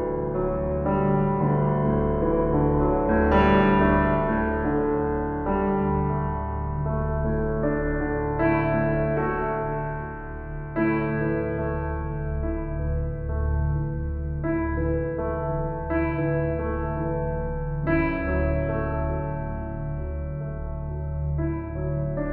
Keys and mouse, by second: 0.0 click, 0.6 shift+click, 1.5 s, 2.4 Escape, 3.5 s, 6.5 click, 7.3 g, 7.7 z, 10.3 Escape, 11.3 typing, 14.8 typing, 17.4 s, 19.7-22.3 drag.